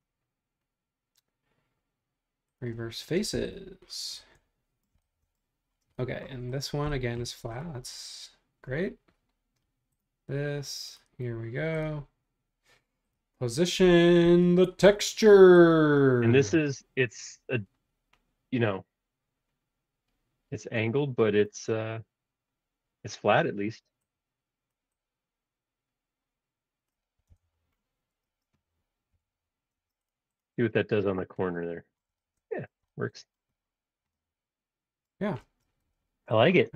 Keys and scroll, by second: 3.2 space, 3.3 Escape, 4.6 space, 27.3 Return, 28.2 space, 29.1 b, 30.8 space, 31.0 ⟲.